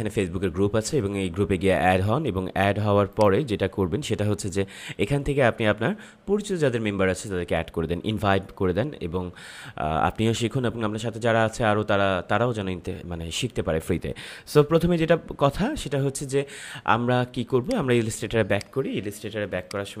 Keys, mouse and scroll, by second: 3.1 click, 5.6 scroll down 1, 14.2 scroll down 1, 15.5 scroll up 1, 17.6 click, 19.5 space, 19.7 click.